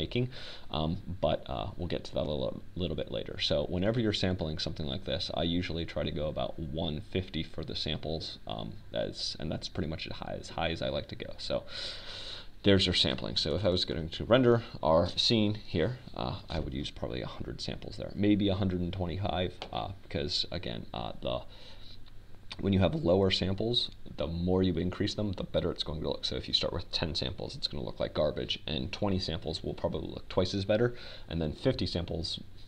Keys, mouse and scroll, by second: 7.5-9.4 drag, 16.9 KP_0, 19.8 click, 20.3-21.5 drag.